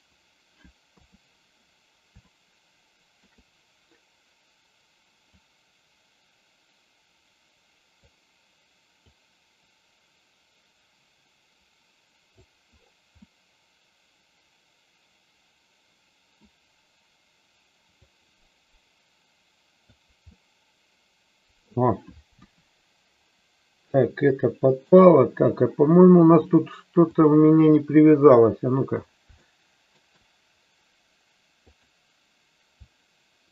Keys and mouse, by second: 0.8 KP_3, 2.3-3.5 shift+middle drag, 5.3-8.1 drag, 9.1-12.6 drag, 13.3-16.6 middle drag, 18.2-20.2 drag, 20.5-21.8 middle drag, 22.5 KP_1, 24.1-25.1 middle drag, 26.3-27.3 drag, 29.5 shift+middle click, 31.7 click.